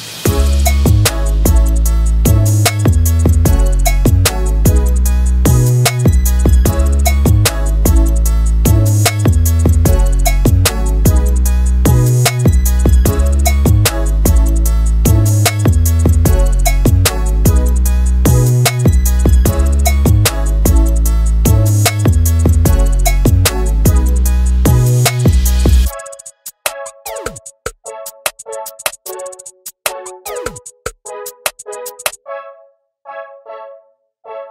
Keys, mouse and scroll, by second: 0.0 click, 0.1 middle click, 0.4 KP_1, 0.6 scroll up 1, 0.7 shift+middle click, 0.8 right click, 1.0 shift+middle click, 1.3-6.1 right drag, 6.1 click, 13.1 KP_7, 13.5-15.1 right drag, 15.1 click, 17.9 z, 18.6-20.8 drag, 20.8 shift+f, 21.2-22.7 drag, 22.7 middle click, 23.2 right click, 23.5 click, 24.1 middle click, 24.8 click, 25.2 middle click, 25.6 ctrl+z, 25.7 ctrl+z, 25.8 middle click, 26.3 KP_7, 26.7 KP_9, 27.0-28.0 right drag, 28.0 click, 28.7 shift+f, 29.0 click, 32.6 shift+f, 33.0-34.0 drag, 34.0 middle click, 34.4 scroll down 2.